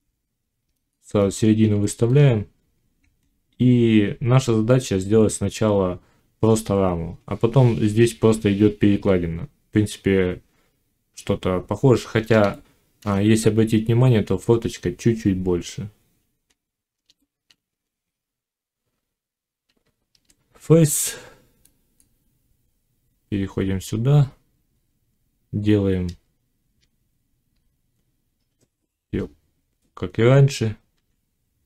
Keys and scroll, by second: 19.5 Tab.